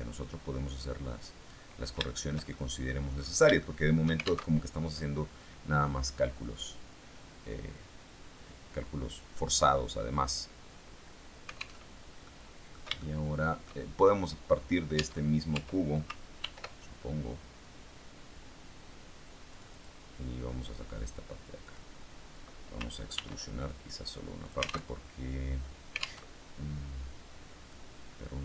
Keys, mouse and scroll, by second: 1.9 shift+middle click, 2.9-3.5 scroll up 1, 3.5 shift+middle click, 4.3 alt+shift+Tab, 11.7 alt+Tab, 12.1 middle click, 12.9 shift+middle click, 14.0 middle click, 14.8 Tab, 16.3 ctrl+r, 19.4 click, 21.5 click, 23.1 ctrl+r, 23.5 ctrl+click, 24.3 alt+click, 24.8 alt+Tab, 26.1 alt+Tab, 27.6-28.4 drag.